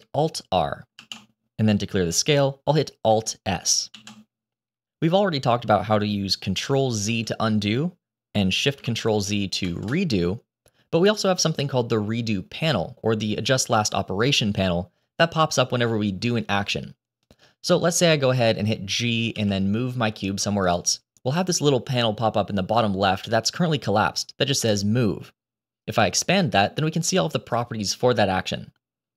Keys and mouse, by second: 0.9 alt+r, 3.9 alt+s, 7.0 ctrl+z, 9.6 ctrl+shift+z, 19.2 g, 25.9 click.